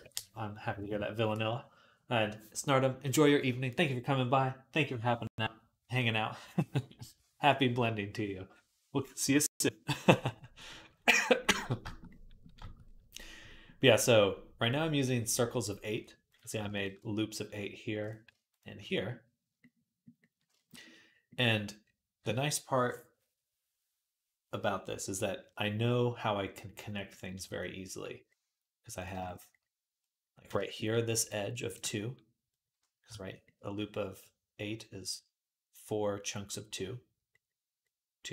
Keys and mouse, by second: 16.1 click, 16.3 shift+middle click, 16.4 shift+a, 16.5 click, 16.6 middle click, 17.8 click, 18.3 shift+a, 28.8 click, 28.9-38.3 shift+middle drag.